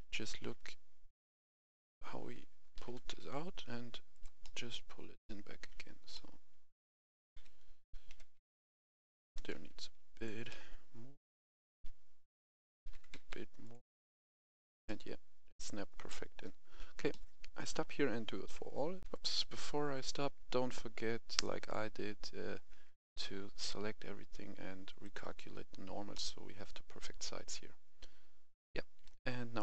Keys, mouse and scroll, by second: 1.0 KP_1, 1.7 KP_3, 2.6 g, 3.0 y, 4.0 click, 4.3 middle click, 4.8 scroll up 1, 5.1 shift+middle click, 5.7 scroll up 1, 6.0 middle click, 7.2 KP_1, 8.0 KP_3, 9.1 g, 9.4 y, 10.0 click, 10.3 middle click, 11.5 KP_3, 12.6 KP_3, 12.7 g, 13.0 y, 13.5 click, 13.8 middle click, 15.6-15.9 scroll down 1, 15.9 middle click, 16.6-17.0 scroll down 1, 17.0-18.6 middle drag, 18.9 right click, 19.0 F10, 21.6-22.6 drag, 22.9 Tab, 23.2 a, 23.5 a, 25.0 click, 26.1-29.6 middle drag.